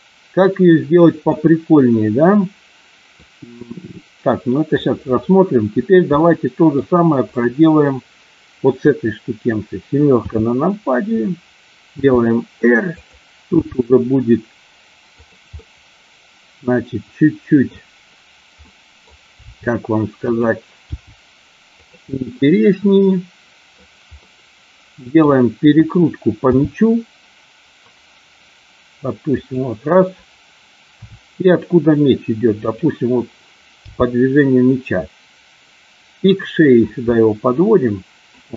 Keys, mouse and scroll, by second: 3.2-4.7 middle drag, 6.2-6.7 middle drag, 7.3 click, 10.1 KP_7, 12.0 r, 12.9 click, 13.5 g, 15.2 click, 15.6-17.7 middle drag, 18.6 middle click, 18.7 scroll up 1, 18.7 middle click, 19.3 r, 20.2 click, 20.9 g, 21.7 click, 22.2-23.7 middle drag, 24.1 scroll up 1, 24.3 middle click, 26.3 r, 29.3 click, 30.8 r, 32.6 click, 33.8 g, 36.2 click, 37.1-38.3 middle drag.